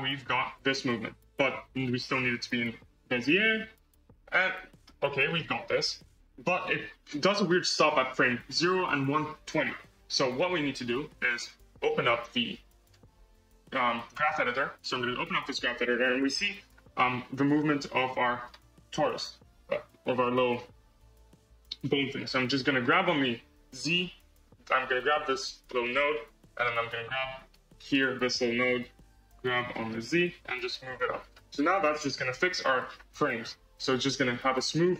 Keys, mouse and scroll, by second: 2.0 t, 4.3-9.5 middle drag, 10.5 space, 11.7-15.2 drag, 16.5 click, 17.4-18.3 scroll down 3, 18.3-19.6 drag, 19.6 KP_Decimal, 20.2-21.0 scroll down 2, 21.0 click, 22.1-22.7 scroll down 4, 22.7 scroll down 4, 23.1 g, 25.2-25.6 scroll down 8, 25.6-27.3 middle drag, 27.3 click, 27.8 click, 29.6 g, 31.5 space, 32.8-33.8 scroll down 20, 34.8-34.9 middle drag.